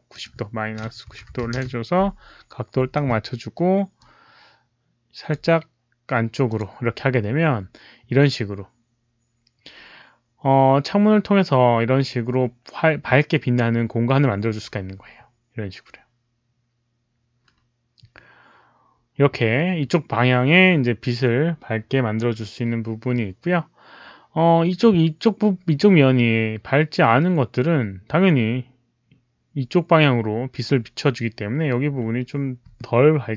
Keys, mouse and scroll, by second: 0.0 click, 1.0 KP_Subtract, 1.2 KP_9, 1.3 KP_0, 1.5 Return, 2.8 w, 3.9 click, 5.2 Return, 5.2 KP_Subtract, 5.2 w, 5.2 KP_0, 5.2 KP_9, 6.4 click.